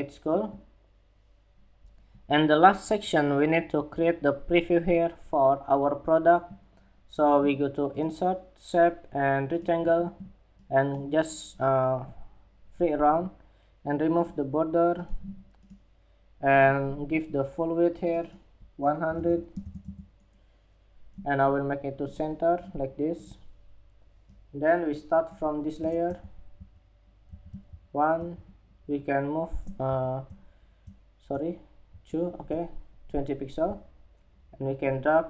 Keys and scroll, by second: 29.3 alt+Down, 31.4 alt+shift+Down.